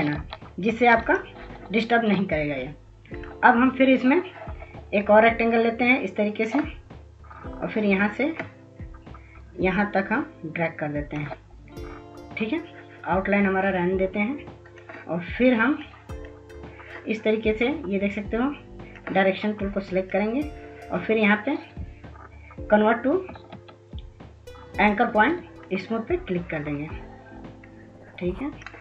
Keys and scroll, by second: 22.3 ctrl+s, 22.7 ctrl+s, 23.4 ctrl+s, 23.7 ctrl+s.